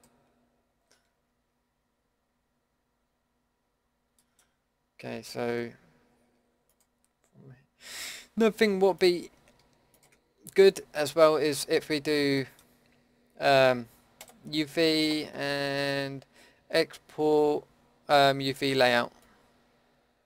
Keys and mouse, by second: 1.1 Tab, 6.7-10.9 middle drag, 10.9 a, 14.4-20.2 middle drag.